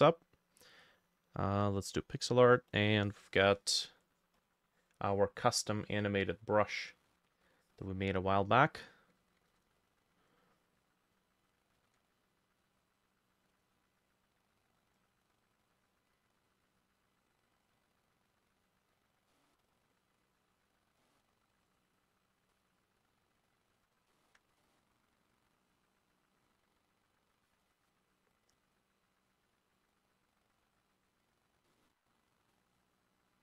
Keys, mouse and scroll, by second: 4.4 double click, 5.8 double click, 9.4-16.1 ctrl+drag, 9.4 ctrl+middle click, 9.6 ctrl+z, 11.8 ctrl+middle click, 11.9 ctrl+z, 17.9 double click, 19.3 middle click, 20.3 double click, 21.0 middle click, 24.1 ctrl+middle click, 24.6 middle click, 27.5 double click, 30.0 double click.